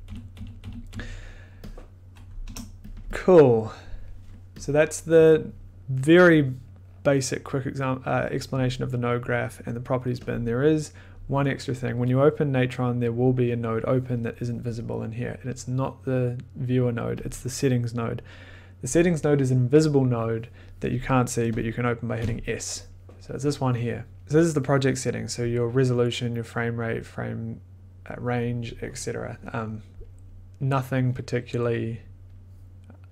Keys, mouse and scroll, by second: 0.6 d, 0.6 click, 0.9 d, 2.3 click, 2.4 BackSpace, 2.9 click, 3.6 click, 4.6 click, 5.7 middle click, 9.1 click, 15.7 click, 17.2 click, 21.6 click, 22.2 s.